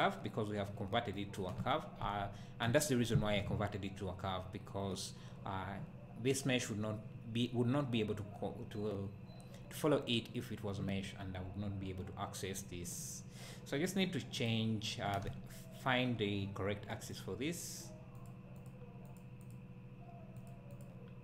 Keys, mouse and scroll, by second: 0.7-1.2 scroll down 1, 14.4 click, 15.3 `, 17.1-18.3 drag, 18.6 click, 19.1 click, 19.4 click, 20.4 click, 20.7 click.